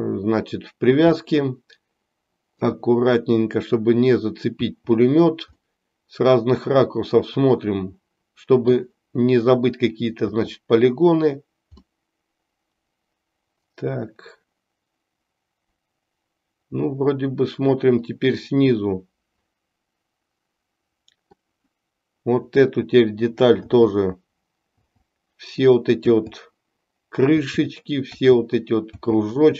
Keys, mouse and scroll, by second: 1.1-2.7 middle drag, 4.9 l, 5.7-8.9 middle drag, 10.3 l, 11.9-21.2 middle drag, 23.6 l.